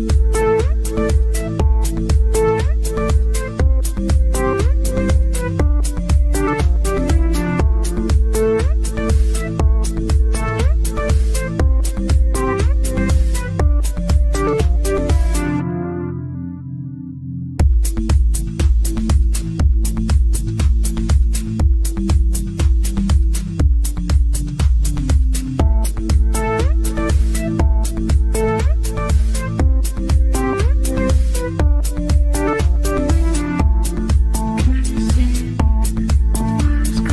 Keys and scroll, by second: 0.7 c.